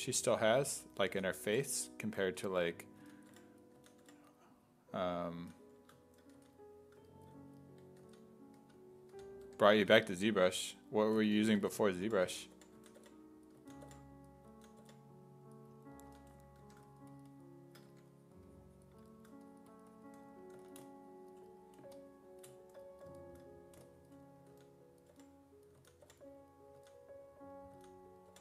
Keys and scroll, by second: 1.1 s, 1.5 5, 2.8-6.4 typing, 8.0-10.6 typing, 11.8-14.8 typing, 16.1 s, 16.6 1, 17.9 1, 20.6 s, 24.5-28.4 typing.